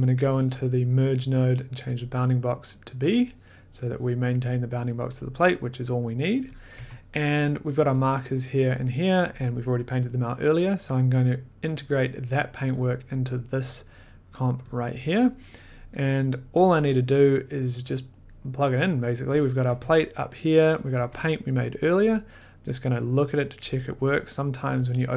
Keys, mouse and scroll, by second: 2.0 click, 2.9 click, 6.6 click, 6.7 1, 8.1 click, 9.3 click, 11.6 click, 12.9 click, 12.9 scroll, 13.5-14.3 scroll, 14.7 click, 14.8-15.6 scroll, 15.6-16.6 scroll, 17.0 middle click, 17.3 middle click, 17.5 middle click, 18.3 middle click, 18.7 middle click, 19.4 click, 19.7 1, 20.2 middle click, 20.9 click, 21.0 2, 21.3 middle click, 24.9 click, 24.9 middle click.